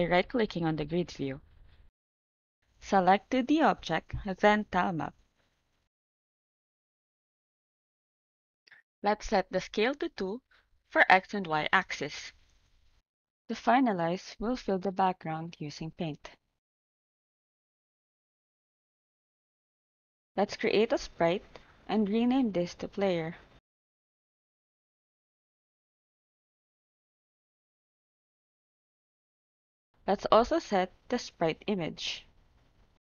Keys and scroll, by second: 9.0 2, 9.8 2, 12.9 ctrl+z, 18.5 ctrl+s, 26.9-28.4 typing.